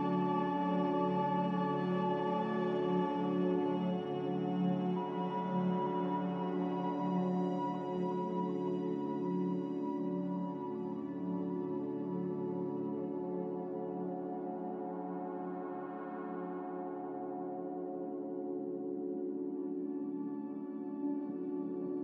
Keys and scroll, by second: 1.6-2.3 typing.